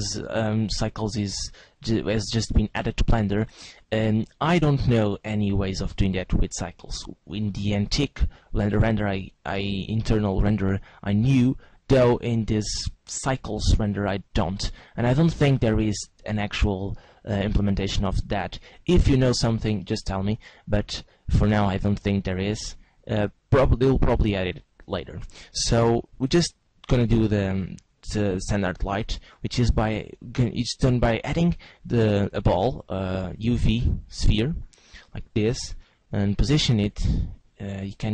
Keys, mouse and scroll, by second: 19.3 shift+a, 32.4 s, 35.0 click, 35.7 g, 37.2 right click.